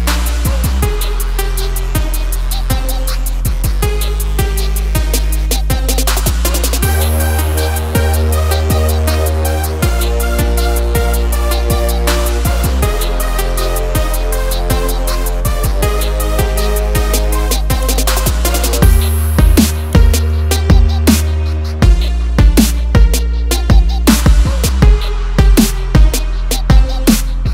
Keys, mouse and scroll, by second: 1.0 click, 2.1 click, 7.6 scroll up 1, 9.1 ctrl+click, 10.7 click, 11.1 double click, 11.9 ctrl+click, 13.3 ctrl+r, 13.8 click, 14.1 double click, 14.9 scroll down 1, 16.3 F4, 17.9 F9, 19.7 click, 20.5 scroll up 1, 21.3 ctrl+click, 22.3 click, 23.3 scroll down 1, 25.0 click, 26.4 click.